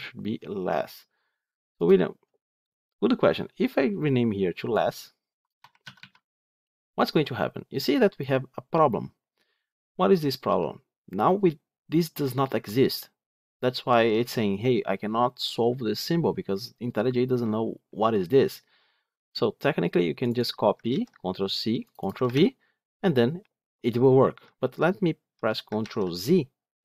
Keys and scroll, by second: 20.8 ctrl+c, 22.1 ctrl+v, 25.7 ctrl+z.